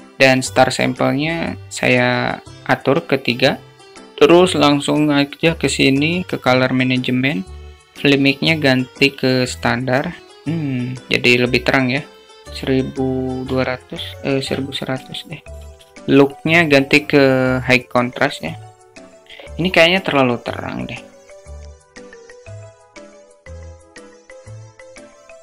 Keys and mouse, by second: 0.7 click, 6.6-8.6 drag, 11.4 click, 12.2-17.3 drag, 15.0 0, 17.7 click, 21.6 middle click, 21.9 middle click, 22.0 0, 22.2 middle click, 22.8 click, 23.0-24.9 typing, 23.2 click, 23.3 click, 23.7 click, 23.9 click, 24.3 click, 24.8 click.